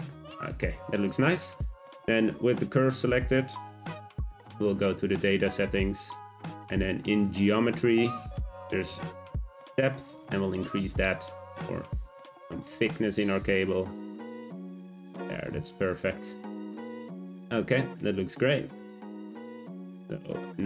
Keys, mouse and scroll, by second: 4.8 click, 7.3 click, 7.9-9.3 scroll down 4, 9.3 click, 14.7 click, 16.2-19.3 middle drag, 19.3 `, 20.6 scroll up 1.